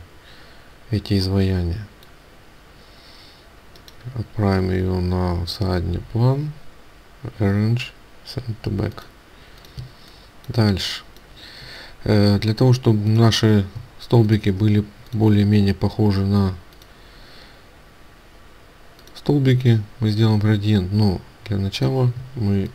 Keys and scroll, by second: 22.3 ctrl+space.